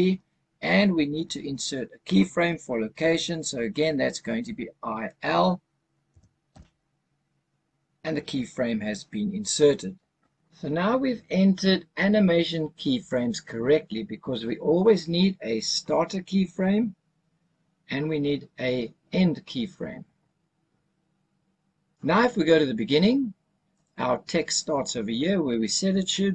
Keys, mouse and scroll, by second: 6.0 i, 23.7 click.